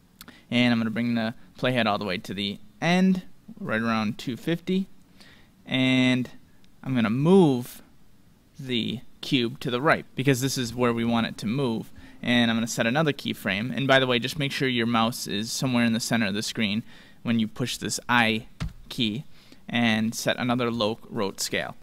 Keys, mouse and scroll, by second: 0.3-2.2 drag, 7.2-9.2 drag.